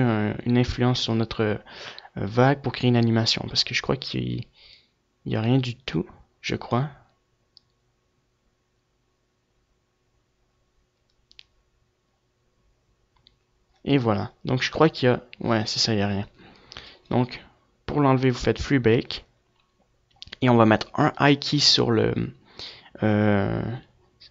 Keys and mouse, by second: 16.6-18.5 drag, 20.2-22.5 drag.